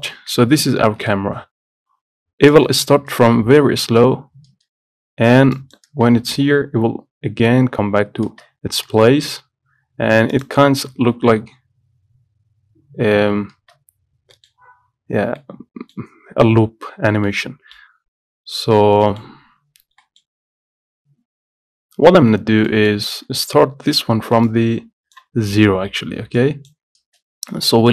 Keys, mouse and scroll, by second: 1.6 scroll up 1, 1.8-2.6 scroll down 1, 2.6-4.6 drag, 4.6 space, 5.7-8.4 drag, 8.4 space, 10.5-14.2 drag, 14.2-14.5 scroll up 1, 14.5 middle click, 14.7 scroll up 4, 15.5-16.7 middle drag, 16.7-17.4 scroll down 2, 17.4 middle click, 18.3-19.2 scroll down 11, 19.2 middle click, 19.5 scroll up 1, 20.1 middle click, 20.6 scroll up 2, 21.6 scroll down 2, 22.5 scroll up 1, 22.8 middle click, 23.1 scroll up 1, 23.3 scroll down 1, 24.6 click, 25.5-25.9 scroll down 14, 26.5-27.5 drag, 27.6-27.9 scroll down 10.